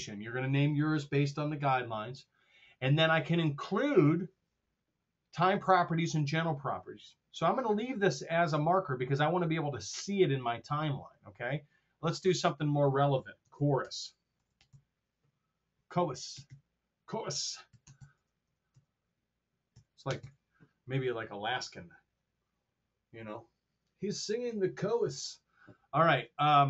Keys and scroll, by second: 0.0-0.4 typing, 13.3-15.1 typing, 16.2 BackSpace, 17.4-18.4 typing, 19.4-20.7 typing.